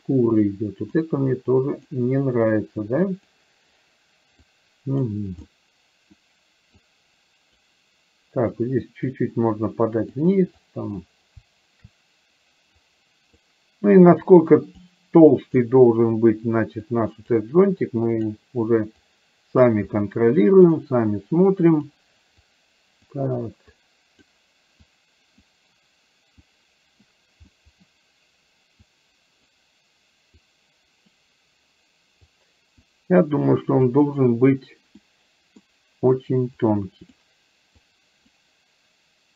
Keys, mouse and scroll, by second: 0.5 click, 1.4 click, 2.5 click, 4.5 click, 5.5 middle click, 6.8 click, 8.7 click, 9.7 click, 10.8 click, 12.8 click, 14.4 click, 15.3 click, 16.9 click, 17.9 click, 19.2 click, 19.9 middle click, 21.7 click, 22.5 click, 23.9 click, 24.9 click, 26.5 click, 27.5 middle click, 28.9 click, 30.4 click, 32.3 click, 33.5 click, 35.0 middle click, 36.8 click, 38.0 click.